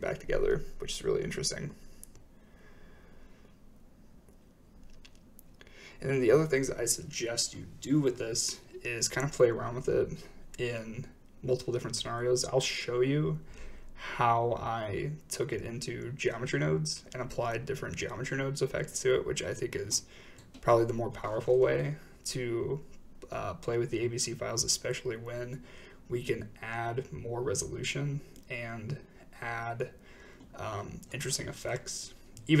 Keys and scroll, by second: 5.5 shift+Right, 5.5 typing, 9.6-10.4 typing, 14.5 g, 16.2 z, 19.2 g, 19.4 z, 21.7 i, 28.4 shift+space, 29.7 space.